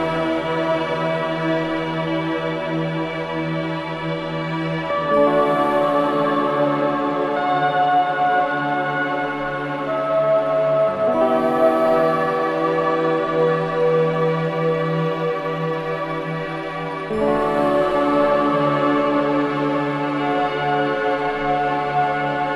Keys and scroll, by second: 2.7 ], 5.4 ], 13.0 ], 18.7 ].